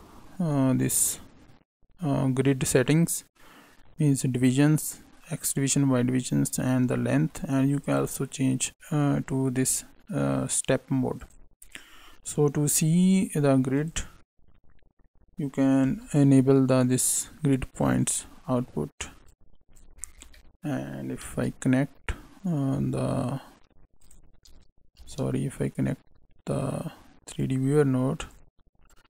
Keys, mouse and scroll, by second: 6.9 middle click, 7.8 click, 8.7 click, 9.5 click, 11.1 click, 13.7 click, 15.8 n, 17.9 click, 18.4 n, 19.2 click, 20.0 middle click, 21.2 shift+a, 23.9 click, 24.9 shift+a, 28.8 click.